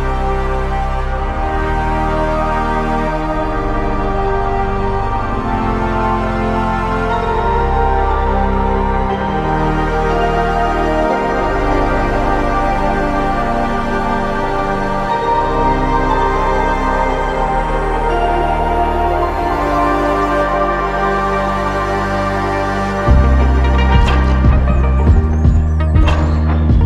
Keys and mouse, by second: 1.1 q, 5.1 double click, 15.5 double click, 16.8 double click, 17.9 double click.